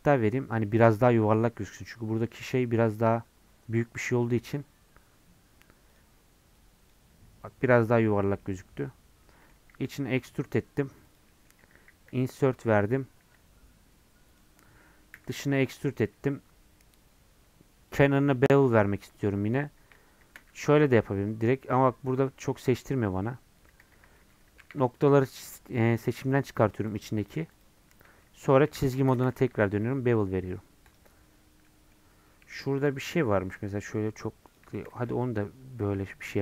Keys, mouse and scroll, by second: 0.0-7.4 right drag, 8.4-9.7 middle drag, 9.7 e, 11.3 middle click, 12.1 i, 22.4-23.8 middle drag, 23.8 ctrl+z, 24.2 middle click, 24.6 1, 25.0 shift+Left, 25.5 shift+Left, 26.4 shift+Left, 26.9 shift+Left, 28.2 middle click, 28.6 2, 29.6 ctrl+b, 31.4 scroll up 1, 31.6 middle click, 32.4 1, 34.0-34.5 scroll up 1, 34.5 click, 34.9 ctrl+shift+b.